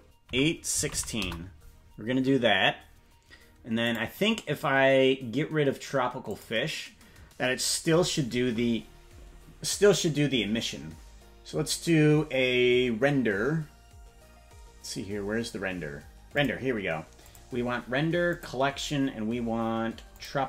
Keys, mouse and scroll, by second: 3.8 click, 6.3 click, 16.3 click, 17.2-18.4 drag, 20.1-20.4 drag.